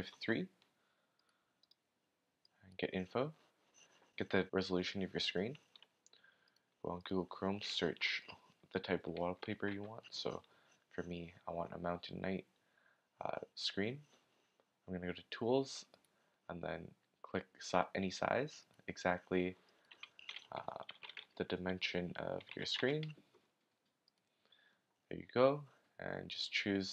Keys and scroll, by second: 9.7 Return, 20.6-23.2 typing.